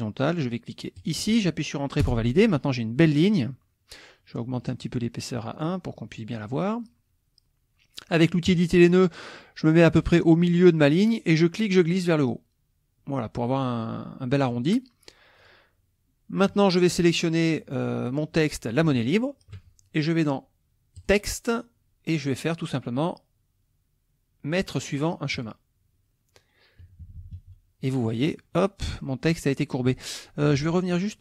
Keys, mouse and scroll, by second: 0.9 ctrl+click, 2.0 Return, 3.0 middle click, 4.6 right click, 5.5 click, 6.1-6.5 middle drag, 8.5 click, 11.3-14.6 drag, 15.4 click, 19.0 shift+click, 21.0 click, 25.3 click, 26.8 KP_Subtract, 28.1 middle click, 28.3 click, 29.0 click, 30.5 ctrl+z, 31.1 ctrl+click.